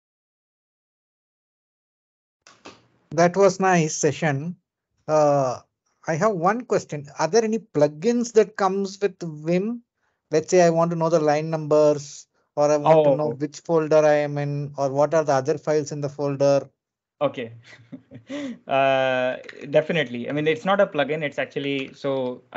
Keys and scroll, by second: 16.9 super+Tab, 19.7 ctrl+j, 19.7 ctrl+l, 20.2 k, 20.5 j, 21.8 shift+;, 22.3 BackSpace.